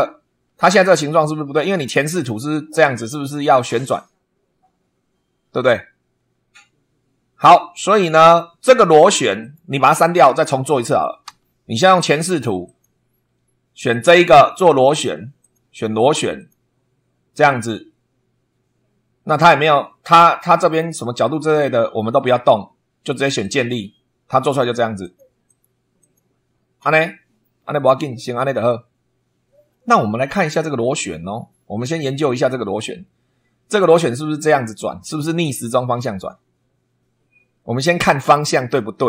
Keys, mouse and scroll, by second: 2.2 click, 9.4 click, 11.2 Delete, 12.6 click, 13.9 click, 15.4 click, 16.4 click, 23.4 click, 25.0 click, 25.5 click, 26.0 click, 29.7-32.7 middle drag.